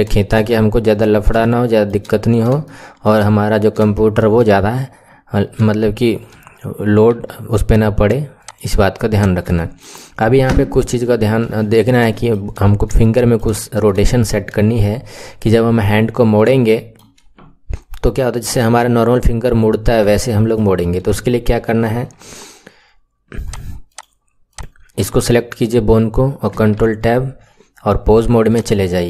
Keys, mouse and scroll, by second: 0.0-0.4 scroll down 4, 0.4 right click, 1.0-1.4 scroll down 2, 1.4 right click, 1.4 shift+middle click, 2.2-2.5 scroll up 4, 2.5 right click, 2.7 shift+middle click, 3.5-3.8 scroll down 1, 3.8-6.8 right drag, 7.2 Tab, 8.3 click, 9.0 click, 9.5-11.2 shift+middle drag, 11.2 KP_7, 11.5-12.0 scroll up 6, 12.0-12.5 shift+middle drag, 12.6-13.0 scroll up 3, 13.0-13.5 shift+middle drag, 13.5-14.0 scroll up 3, 14.0-19.6 shift+middle drag, 20.1-23.4 shift+middle drag, 23.4 click, 23.8 click, 24.4 click, 26.6 ctrl+Tab, 28.4 click.